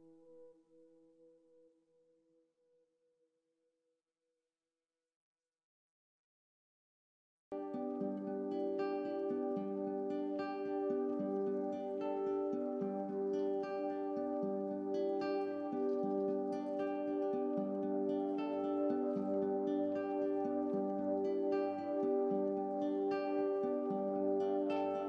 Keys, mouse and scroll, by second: 0.5 Tab, 1.0 middle click, 1.7 click, 2.2 KP_7, 2.8 g, 3.7 shift+d, 5.7 middle click, 6.0-6.5 scroll up 2, 6.5 s, 9.5 shift+d, 11.7 KP_3, 12.1-12.7 scroll up 2, 12.7 g, 14.0 middle click, 14.9 KP_3, 15.6 g, 16.7 middle click, 16.9-17.2 scroll down 2, 17.2 shift+middle click, 17.4 click, 17.6-18.9 scroll up 1, 18.9 KP_1, 19.5 middle click, 19.7 scroll down 1, 20.0-21.1 shift+middle drag, 21.1 click, 21.6 KP_1, 22.3 shift+d, 22.9 r.